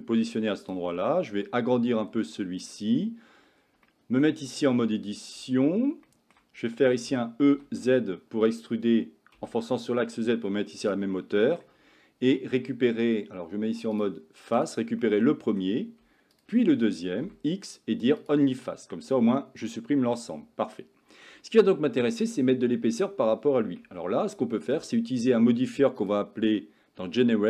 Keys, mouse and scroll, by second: 1.4 s, 3.9-4.3 shift+middle drag, 4.8 Tab, 6.1 shift+middle click, 7.1 e, 11.3 middle click, 14.0 click, 15.1 middle click, 17.3 x, 18.7-21.3 middle drag, 22.3 click, 23.9 Tab, 26.0-27.4 drag.